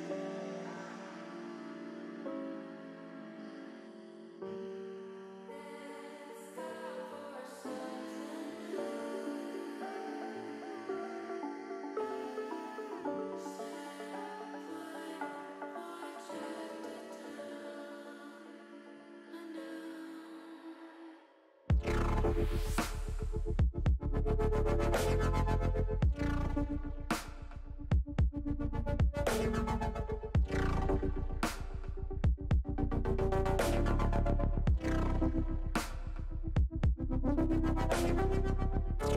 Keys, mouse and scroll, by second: 1.1 r, 2.3 z, 2.8 1, 3.3 8, 3.6 0, 4.1 click, 4.5 middle click, 6.2 click, 7.8-9.6 drag, 10.0 middle click, 10.6 shift+middle click, 11.9-12.9 drag, 13.4 middle click, 13.9 middle click, 15.2 shift+middle click, 16.2 click, 17.3 middle click, 18.8 click, 20.4 l, 21.5 middle click, 22.6-23.8 drag, 24.2 middle click, 28.8 click, 29.7 l, 30.4-31.9 drag, 33.3 s, 34.2 z, 35.7 click, 36.3 click, 38.0 click.